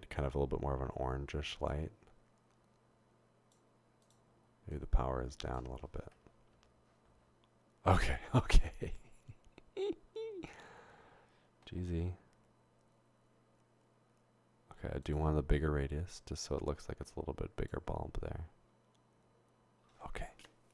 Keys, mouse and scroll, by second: 4.0 click, 4.7 click, 6.9 0, 12.9 typing, 16.2-17.7 drag.